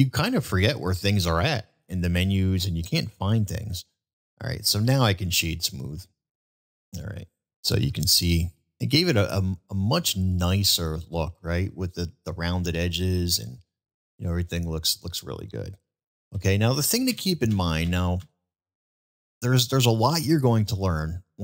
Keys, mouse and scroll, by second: 1.9-2.3 middle drag, 7.6 middle drag, 8.6-9.1 middle drag, 9.7-10.5 middle drag, 11.3-12.1 middle drag, 12.5-13.4 middle drag, 13.7-15.0 middle drag, 16.0-18.8 ctrl+z, 20.9 middle drag.